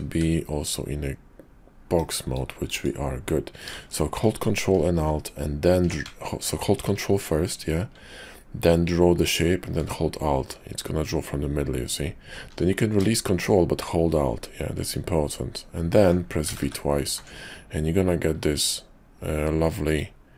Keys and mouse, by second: 0.0 d, 2.2 click, 8.8-20.0 ctrl+drag.